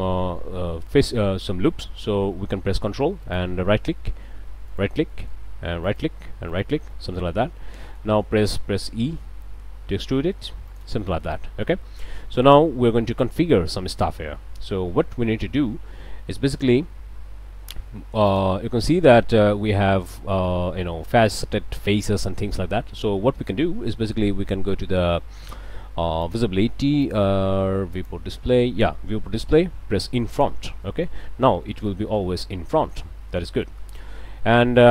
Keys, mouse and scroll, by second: 0.4 click, 3.2 ctrl+click, 4.7 ctrl+right click, 5.1 ctrl+middle click, 5.9 ctrl+right click, 6.5 ctrl+right click, 6.9 ctrl+middle click, 7.4 ctrl+a, 7.8 ctrl+click, 9.2 e, 10.7 click, 11.8 click, 13.2 click, 18.3 click, 26.2 click, 27.0 click, 27.9 click, 28.7 scroll down 1, 30.3 click, 30.8 click, 31.6 click, 32.2 click, 33.6 click, 34.6 click.